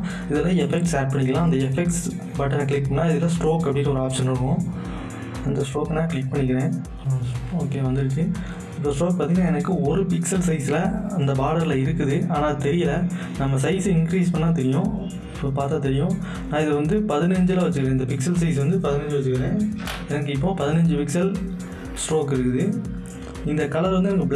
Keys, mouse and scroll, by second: 1.8 click, 1.8 click, 5.3 click, 5.4 click, 13.9-21.2 drag, 23.9 click.